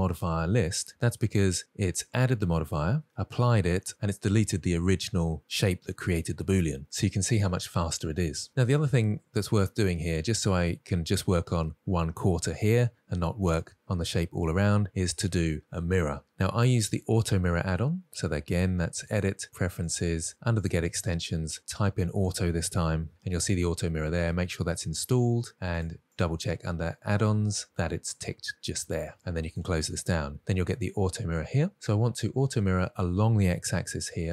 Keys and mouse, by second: 8.5 n, 10.8 middle click, 14.5 middle click, 19.1-20.1 drag.